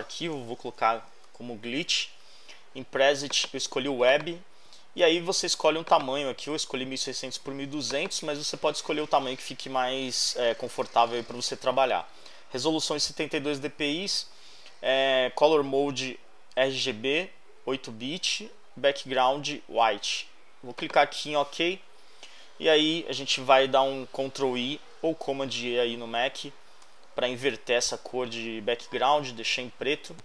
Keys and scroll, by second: 0.1-1.7 typing.